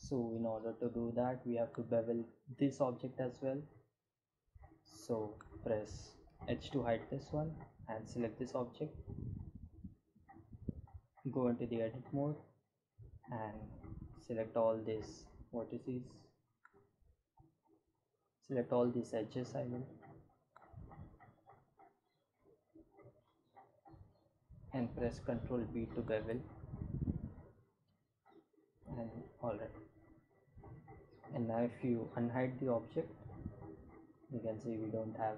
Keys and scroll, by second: 4.9 h, 8.8 Tab, 25.3 ctrl+b, 27.4 Tab.